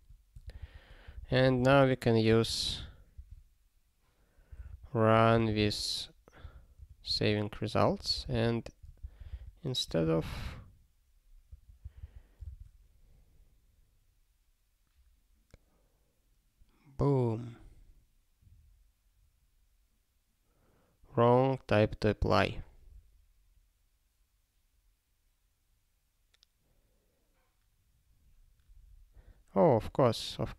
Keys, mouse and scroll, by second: 1.2 alt+b, 1.3 alt+b, 2.3 alt+d, 2.5 alt+d, 4.5 r, 5.2 -, 5.6 h, 6.4 -, 7.1 alt+/, 7.8 ctrl+n, 8.1 alt+b, 9.0 ctrl+b, 9.3 ctrl+alt+k, 9.8 BackSpace, 10.2 ctrl+s, 11.5 ctrl+p, 11.8 ctrl+n, 12.0 ctrl+n, 30.1 click.